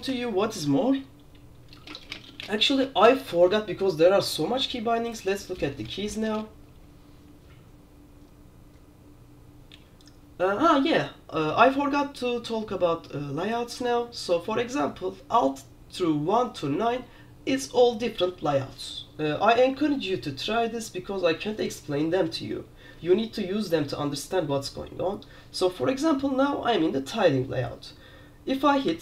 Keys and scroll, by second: 19.8 q.